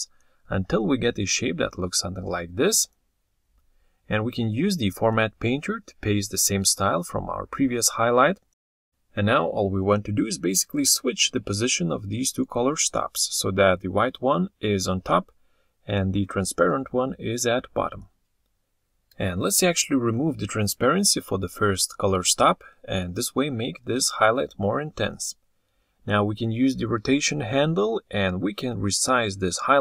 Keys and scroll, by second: 0.1 ctrl+z.